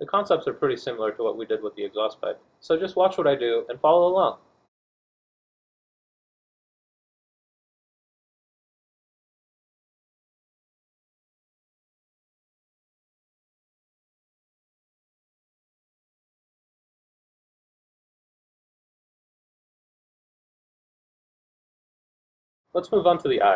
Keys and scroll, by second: 1.5 r, 2.7 F1, 13.3 shift+8, 17.9 F2, 21.9 F1.